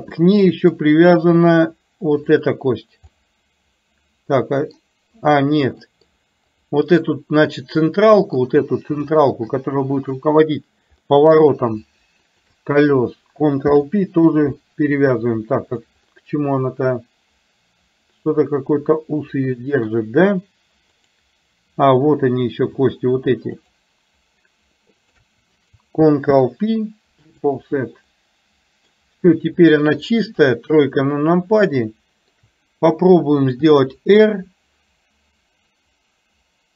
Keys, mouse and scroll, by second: 0.3 middle click, 1.3 middle click, 2.4 click, 3.3-4.9 middle drag, 6.0 middle click, 6.5 click, 7.9 middle click, 9.1 shift+middle click, 11.1 middle click, 16.1-19.9 middle drag, 21.1 click, 22.1 click, 23.8 shift+click, 28.3 middle click, 29.8 click, 30.4 KP_3, 32.0 middle click.